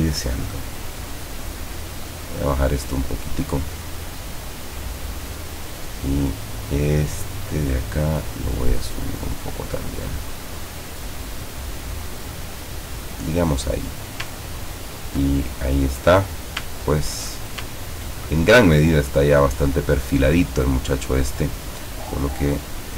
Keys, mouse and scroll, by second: 0.4-5.6 drag, 6.2 click, 7.9-9.9 drag, 11.1-13.2 drag, 13.8 click, 14.5 ctrl+scroll down 1, 15.4 ctrl+middle click, 16.9 ctrl+scroll down 1, 18.8-22.9 drag.